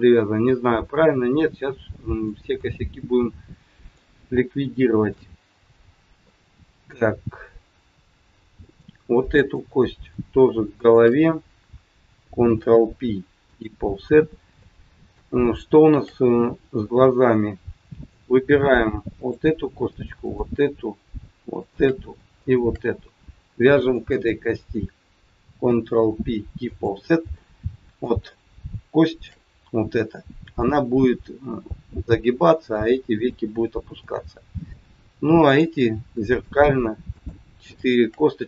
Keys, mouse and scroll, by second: 0.3-1.0 scroll up 1, 1.0-1.3 scroll down 1, 1.3 middle click, 2.6 middle click, 2.6-3.2 scroll up 1, 4.2-4.6 scroll up 2, 4.6 shift+middle click, 5.7-6.1 scroll down 1, 6.2 middle click, 9.2 click, 10.8 shift+click, 12.5 ctrl+p, 14.2 scroll up 1, 14.6 middle click, 15.3 shift+middle click, 16.3-16.9 scroll up 2, 16.8 middle click, 18.3 scroll down 1, 19.1 click, 20.2 shift+click, 21.5 click, 22.3 shift+click, 23.7 shift+click, 25.6 ctrl+p, 27.3 middle click, 28.3 shift+middle click, 29.4-29.8 scroll up 2, 32.7 middle click, 33.8 middle click, 33.8 scroll up 1, 35.5 click, 36.5 shift+click, 37.1 click, 38.1 shift+click.